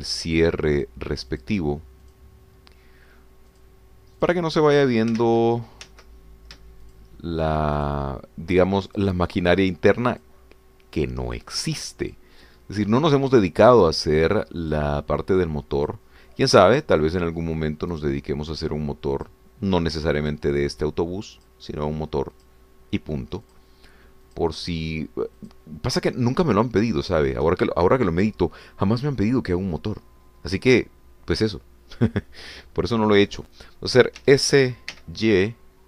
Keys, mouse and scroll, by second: 0.0 shift+click, 1.2 shift+click, 1.9 shift+click, 2.3 shift+click, 3.0 shift+click, 4.5 shift+click, 5.2 shift+click, 6.2 ctrl+shift+z, 7.8 ctrl+shift+click, 8.9 shift+click, 10.0 shift+click, 11.3 shift+click, 12.4 shift+click, 13.2 shift+click, 14.0 shift+click, 14.7 shift+click, 15.6 shift+click, 16.8 shift+click, 17.6 shift+click, 18.9 shift+click, 20.2 shift+click, 21.2 shift+click, 22.4 shift+click, 23.5 shift+click, 24.6 shift+click, 25.4 shift+click, 26.5 shift+click, 28.0 shift+click, 35.2 s.